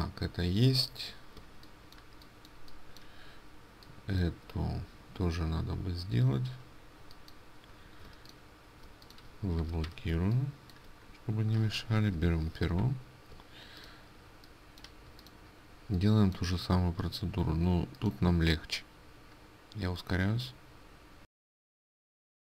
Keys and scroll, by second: 8.1 ctrl+space, 10.0 ctrl+2, 13.4 ctrl+space, 22.2 ctrl+space.